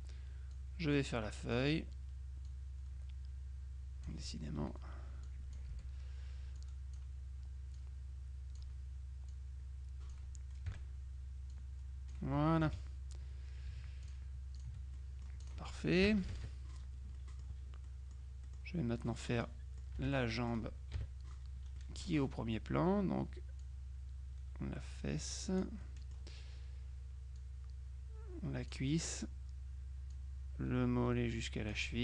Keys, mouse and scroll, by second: 0.6-2.1 drag, 2.5-4.7 drag, 5.3 click, 5.8 Delete, 6.7 click, 7.9-9.1 drag, 9.4 click, 11.6 click, 12.7 F2, 14.1 shift+click, 15.0 click, 15.5 click, 16.1 KP_Subtract, 17.2 click, 18.5 click, 19.5 click, 20.1 F6, 21.0 KP_Subtract, 21.9 click, 23.7-26.2 drag, 27.5-29.3 drag, 30.2-32.0 drag.